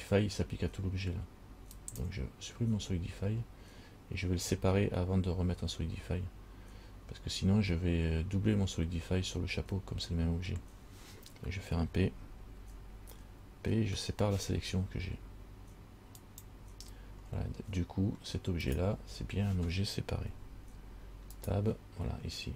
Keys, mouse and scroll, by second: 2.0 click, 12.8 p, 18.9 right click, 20.5 Tab, 21.6 right click.